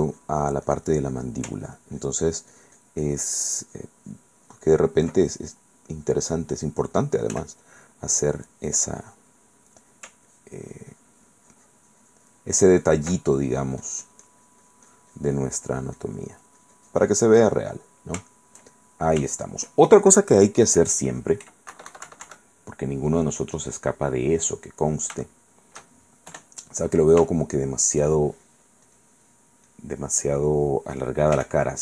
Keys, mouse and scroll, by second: 0.1 click, 1.8 ctrl+click, 2.2-3.5 ctrl+drag, 3.8 ctrl+click, 5.1 ctrl+click, 5.2-7.8 ctrl+middle drag, 7.5 f, 7.8 click, 8.2-9.5 drag, 9.6 middle click, 10.5 ctrl+click, 10.9-13.2 ctrl+drag, 13.5-16.4 ctrl+drag, 16.6-18.4 ctrl+drag, 18.5 ctrl+shift+middle click, 18.5 ctrl+shift+click, 19.5 shift+click, 21.6 KP_Add, 23.5 click, 24.8 click, 25.9 shift+click, 26.5 KP_1, 27.5 shift+middle click, 29.1 click, 29.9 click, 31.5 f.